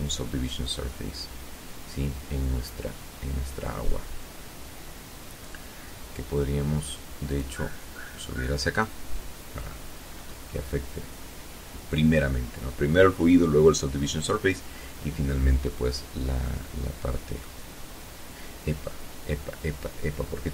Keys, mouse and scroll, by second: 6.0 click, 8.8-9.2 scroll up 2, 16.1-20.5 middle drag.